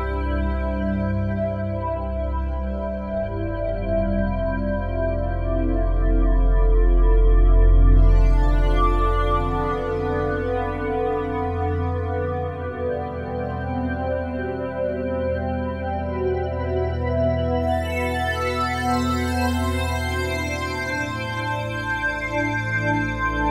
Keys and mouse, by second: 7.2 click, 9.8-13.3 drag, 13.4 typing, 13.7 Return, 15.5 click, 16.0 click, 17.1 typing, 17.6 Return, 19.1-23.5 drag.